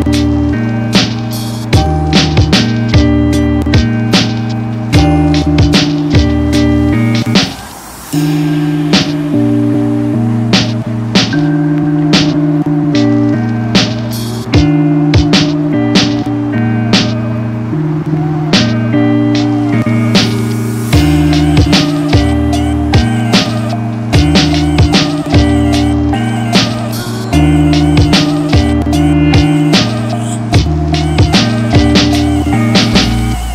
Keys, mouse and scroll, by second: 4.6 click, 6.9 space, 7.1 click, 7.3 space, 8.7 click, 10.6 alt+right click, 11.5-16.5 drag, 19.4 click, 24.2-24.6 typing, 25.3 click, 26.0 v, 26.7 ctrl+t, 27.5-28.2 alt+scroll down 1, 28.4-29.6 shift+drag, 29.6 alt+scroll up 1, 30.1 click, 31.3-33.5 alt+drag.